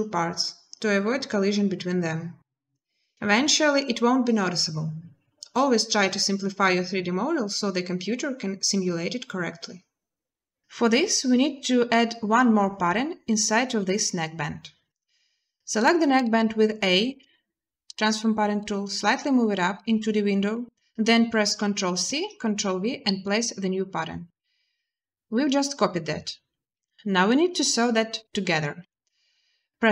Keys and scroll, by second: 16.9 a, 21.4 ctrl+c, 22.0 ctrl+v, 28.6 n.